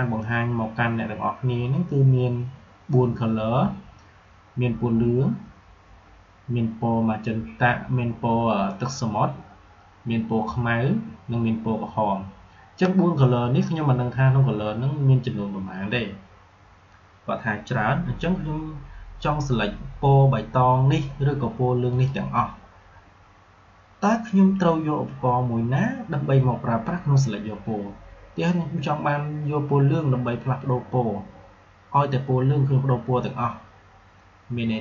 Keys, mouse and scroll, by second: 21.8 click.